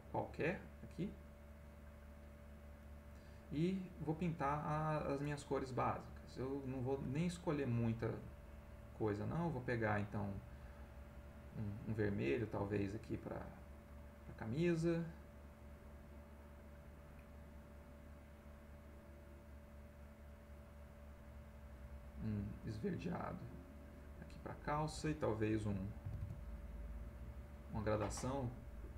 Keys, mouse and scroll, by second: 2.7 click, 6.1 right click, 9.1 click, 10.1-11.9 drag, 12.4 click, 13.0 click, 14.8 right click, 17.2 click, 18.2-21.9 drag, 22.1 click, 22.6-24.1 drag, 26.1 k, 26.4-27.9 drag, 28.3 middle click.